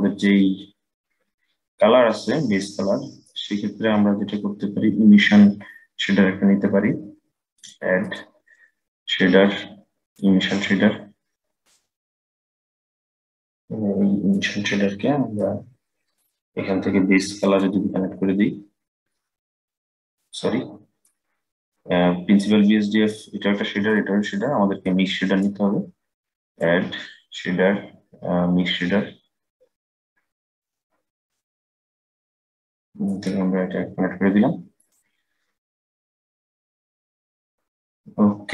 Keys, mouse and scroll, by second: 2.3-5.4 middle drag, 7.3-10.9 drag, 13.2-18.2 drag, 19.3-22.3 drag, 23.6-24.7 drag, 26.2-29.3 drag, 32.3-35.3 drag.